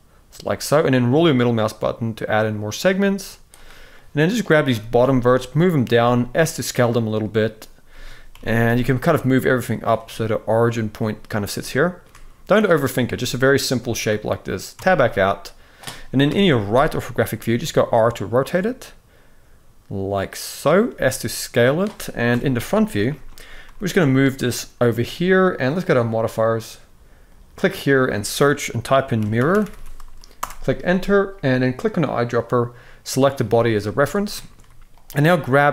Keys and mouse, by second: 3.7 click, 4.4 g, 5.7 s, 7.6 a, 8.0 g, 11.3 shift+middle click, 12.6 click, 12.9 s, 14.5 Tab, 16.1 KP_3, 17.2 r, 20.6 s, 22.0 KP_1, 22.8 shift+middle drag, 23.3 g, 25.5 click, 27.0-30.1 drag, 29.3 r, 31.6 click, 33.5 z, 34.1 middle drag, 35.3 g.